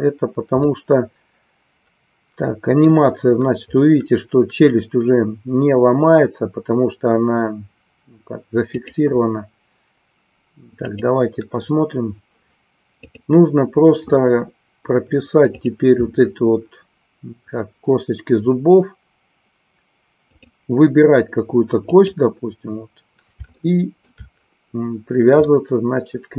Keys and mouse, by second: 0.6-3.1 middle drag, 8.7 click, 10.8 click, 13.1-15.8 drag, 21.8 click, 23.5 shift+middle click, 25.5-26.3 middle drag.